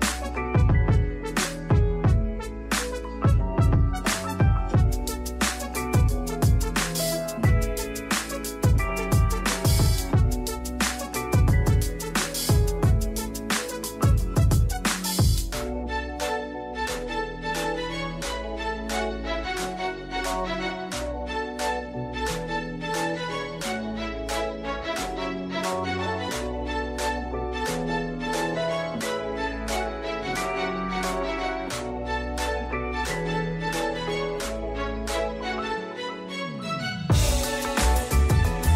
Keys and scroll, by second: 3.6 e, 37.0-38.7 typing.